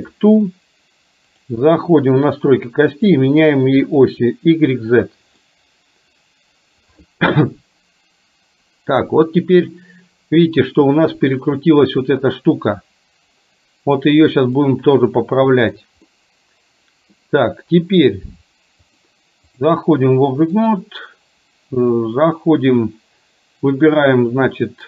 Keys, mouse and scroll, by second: 1.4 click, 3.0 click, 3.9 click, 5.4-7.0 middle drag, 14.8-15.8 middle drag, 16.1-17.3 middle drag, 19.1 click, 20.6 click.